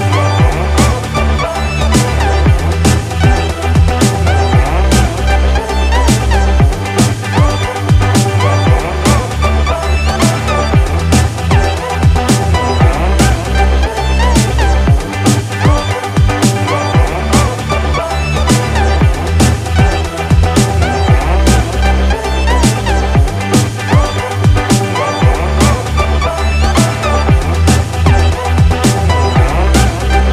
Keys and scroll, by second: 15.4 ctrl+-, 23.3 ctrl+=, 28.9 ctrl+z.